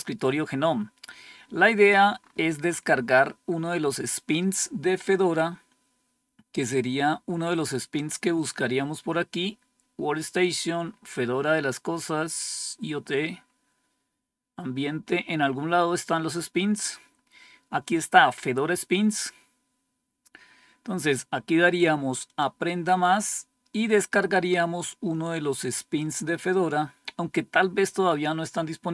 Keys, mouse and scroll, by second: 0.6-1.5 scroll down 2, 1.5-2.1 scroll down 1, 2.1-3.2 scroll up 4, 3.8-6.6 scroll up 1, 6.6 click, 8.7-9.7 scroll up 2, 9.7-13.2 scroll down 4, 13.2-14.4 scroll down 4, 15.6-22.1 scroll down 3, 22.1 click, 26.5-28.8 scroll down 2, 28.8-28.9 scroll down 1.